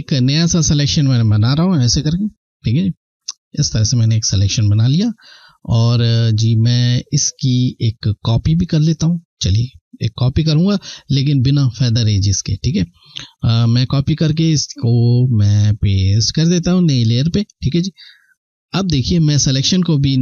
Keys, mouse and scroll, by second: 0.7 Left, 12.6 click.